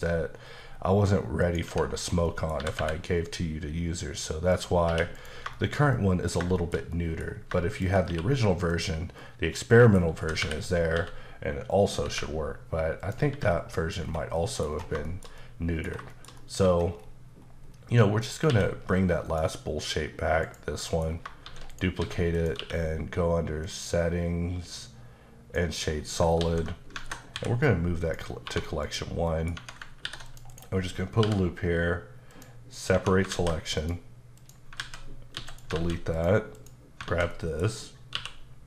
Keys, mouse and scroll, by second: 0.0-1.4 scroll up 5, 1.4 click, 1.7 Tab, 1.9 scroll up 1, 2.0 scroll down 3, 2.3 middle click, 2.6 typing, 4.5 click, 4.9 q, 5.2 click, 5.5 shift+middle click, 6.6 shift+middle click, 7.3 scroll up 2, 7.7 shift+click, 8.1 q, 8.7 click, 9.2 middle click, 10.2-11.0 typing, 12.1 y, 13.3 click, 13.3 h, 13.5 scroll down 3, 13.8 middle click, 14.4 middle click, 14.7 scroll down 2, 15.1 shift+middle click, 15.3 middle click, 16.1 shift+middle click, 16.3 middle click, 16.6-17.7 scroll up 5, 17.7-18.2 scroll down 1, 18.2 click, 18.5 q, 19.3 click, 19.9-20.4 scroll down 1, 20.4 click, 20.8 middle click, 21.1 scroll up 2, 21.5 shift+d, 21.7 right click, 22.0 s, 22.4 click, 22.6 q, 23.7 click, 26.0 scroll up 2, 26.4 alt+s, 27.4 m, 28.1 click, 28.5 1, 28.9 click, 29.3 middle click, 29.6 Tab, 30.1 ctrl+r, 30.3 click, 30.5 right click, 31.2 p, 32.3 click, 33.0 Tab, 33.3 alt+z, 33.8 click, 34.4 click, 34.8 alt+z, 35.5 click, 35.8 alt+z, 36.2 click, 36.6 click, 37.1 alt+z, 37.3 middle click, 38.2 q.